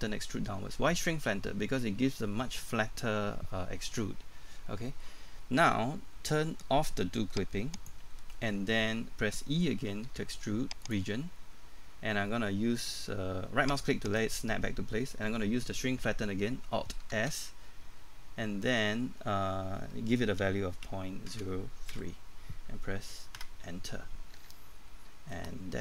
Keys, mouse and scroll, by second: 7.7 click, 10.1 e, 10.8 click, 14.1 right click, 17.1 alt+s, 20.9 KP_Decimal, 21.3 KP_0, 24.4 Tab, 24.9-25.3 scroll down 1, 25.3 middle click.